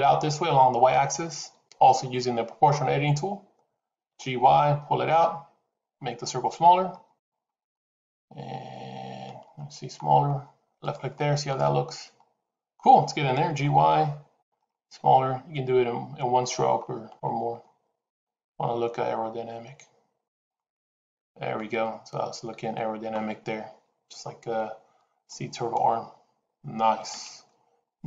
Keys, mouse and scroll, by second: 3.9 g, 11.0 middle click, 13.3 g, 20.4 middle click.